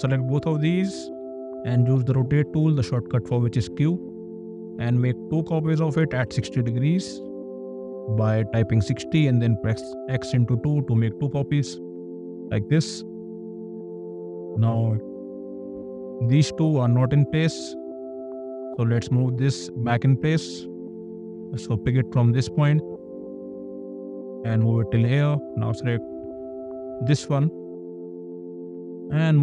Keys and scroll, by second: 1.1 q, 1.9 q, 6.5 KP_0, 7.2 Return, 9.0 *, 9.8 KP_2, 10.5 Return, 11.9 space, 21.1 m, 25.0 space, 27.6 m.